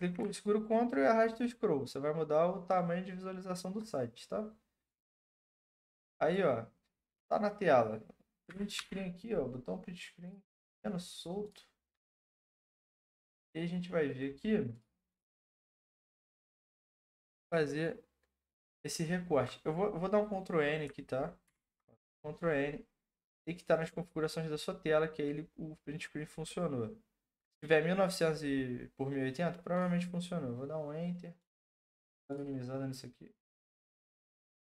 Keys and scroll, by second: 8.4 Print, 8.7 Print, 21.4 ctrl+n.